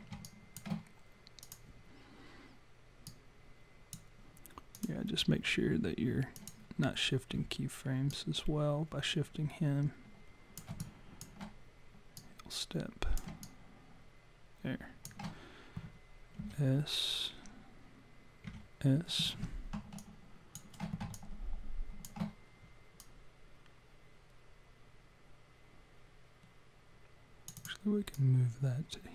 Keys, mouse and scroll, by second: 0.3 alt+click, 1.4 click, 3.1 click, 4.7 click, 6.4 click, 8.1 click, 10.8 alt+click, 12.2 click, 13.4 alt+click, 16.4 s, 18.5 s, 20.0 alt+click, 21.2 alt+click, 23.0 click, 27.6 click, 28.2 click.